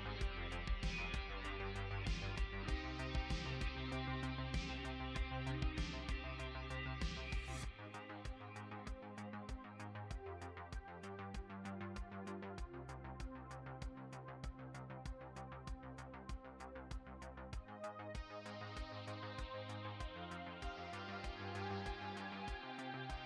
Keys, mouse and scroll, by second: 8.7 click, 10.9 click, 14.3 ctrl+click.